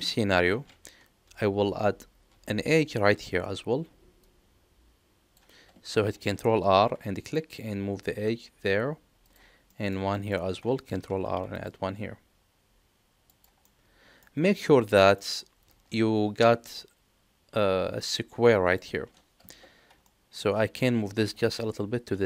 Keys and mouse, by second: 0.2 middle click, 6.7 ctrl+r, 9.6 middle click, 10.1 shift+middle click, 11.0 ctrl+r, 13.6 middle click, 14.9 middle click, 20.0 middle click, 21.2 g.